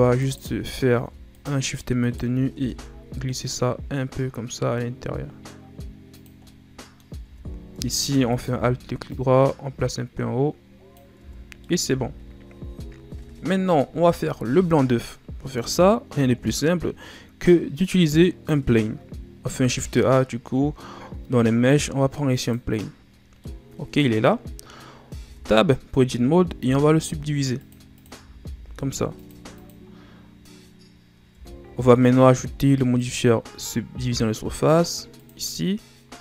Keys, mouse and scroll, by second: 0.1 alt+right click, 1.3 shift+right click, 2.0 shift+right click, 2.5 s, 6.4 middle click, 7.2 Tab, 7.7 Tab, 8.3 alt+right click, 9.0-11.1 drag, 11.1 Tab, 11.3-11.6 scroll down 3, 11.6 middle click, 11.9 a, 13.1 KP_1, 19.4 shift+a, 23.1 scroll down 2, 23.3-25.1 middle drag, 25.1 Tab, 26.6 ctrl+r, 28.4 ctrl+r, 31.3 Tab, 32.9-36.0 drag.